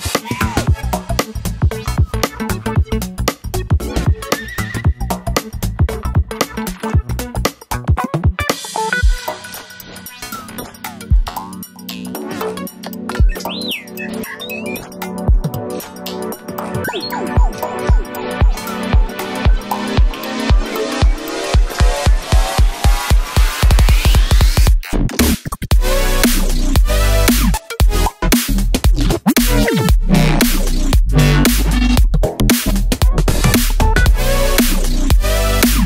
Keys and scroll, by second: 5.3 Left, 5.7 Left, 6.4 Right, 6.6 Right, 7.5 Right, 7.7 Right, 10.0 Right, 10.3 Left, 11.1 Right, 13.2 Down, 13.4 Left, 15.3 Left, 20.6 Up, 20.7 Up, 20.8 Up, 20.9 Up, 21.6 Down, 31.0 Right.